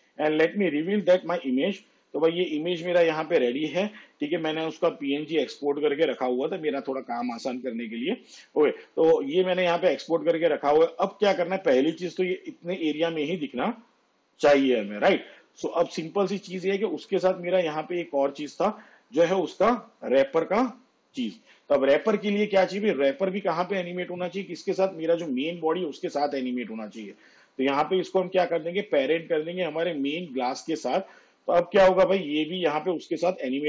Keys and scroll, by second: 4.5 v.